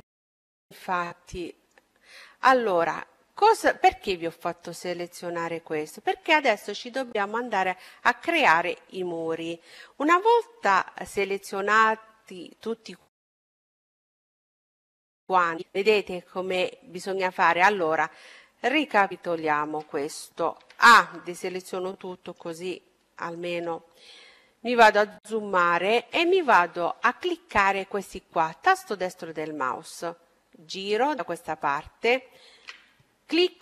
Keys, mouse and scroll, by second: 1.7-4.2 middle drag, 11.5-13.7 middle drag, 15.9-19.4 middle drag, 18.5 a, 21.2-25.1 middle drag, 25.4-27.1 right drag, 27.5-31.0 middle drag, 32.7-33.6 right drag.